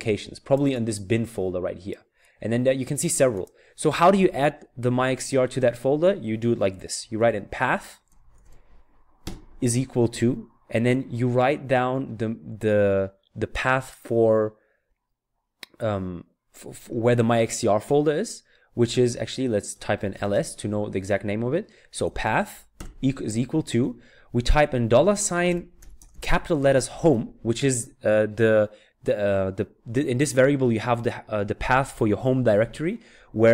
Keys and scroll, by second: 7.8-9.2 typing, 19.9-20.7 typing, 21.8-23.3 typing, 24.6-26.8 typing.